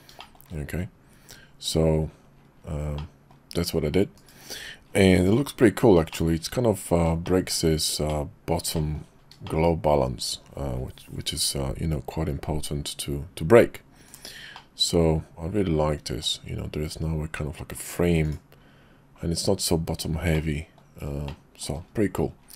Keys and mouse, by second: 0.2 shift+click, 3.0 middle click, 4.2 KP_Divide, 5.2 click, 6.1 middle click, 6.3 middle click, 7.2 shift+middle click, 8.1 middle click, 8.7 shift+middle click, 9.4 shift+click, 14.5-16.2 middle drag, 18.2 click, 20.3 middle click, 21.3 shift+middle click.